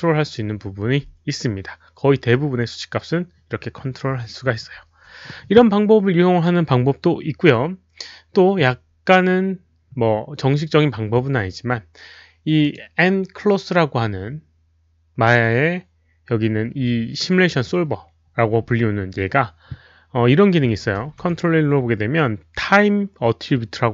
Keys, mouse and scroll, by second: 12.7 click, 21.0 ctrl+a, 23.4 ctrl+a.